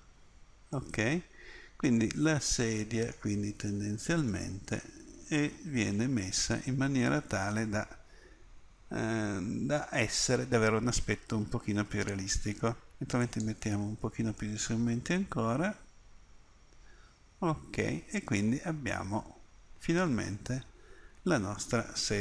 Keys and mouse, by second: 0.7 middle click, 5.9 middle click, 6.1-7.5 middle drag, 14.5 middle click, 15.7 middle click, 15.9 middle click, 16.3 middle click, 17.1 middle click, 19.3-21.6 middle drag.